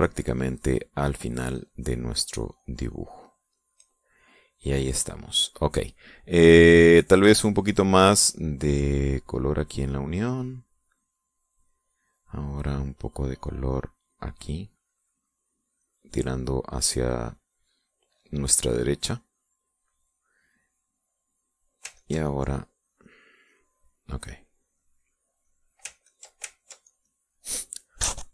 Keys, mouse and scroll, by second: 2.1-4.3 drag, 4.3-6.0 middle drag, 9.0-12.4 drag, 13.5 click, 13.8-16.2 drag, 16.2 click, 19.0 middle click, 19.9 middle click, 20.5 middle click, 20.8-21.9 scroll up 1, 21.9 click, 22.5 ctrl+click, 22.8-26.4 ctrl+drag, 26.6 ctrl+click, 27.0 ctrl+click, 27.4 ctrl+click.